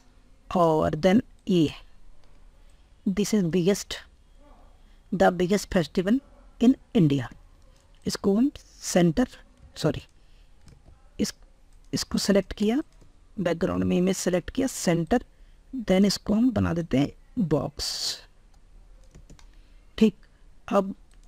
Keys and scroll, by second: 10.1 ctrl+z.